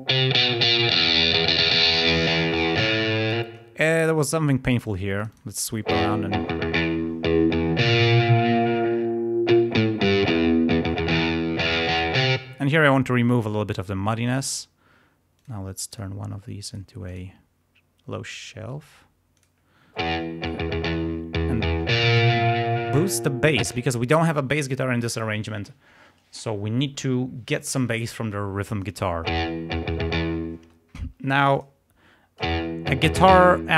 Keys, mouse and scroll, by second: 3.5 space, 5.8 space, 12.1 click, 12.3 space, 15.3 click, 15.9 click, 16.7 click, 17.1 click, 19.3 click, 20.0 space, 20.5-23.2 drag, 23.7 space, 29.2 space, 30.5 space, 31.5 click, 32.4 space.